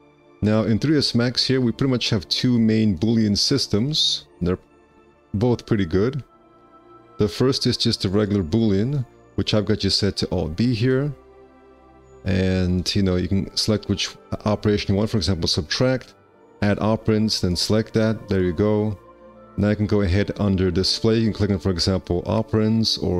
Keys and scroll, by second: 2.1 q, 3.6 w, 6.7 q, 10.8 alt+b.